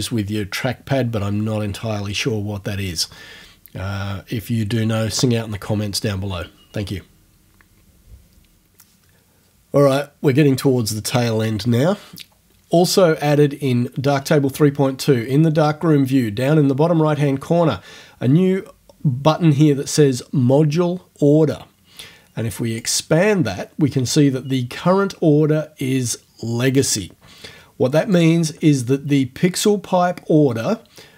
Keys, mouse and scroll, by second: 22.8 click, 28.1 click.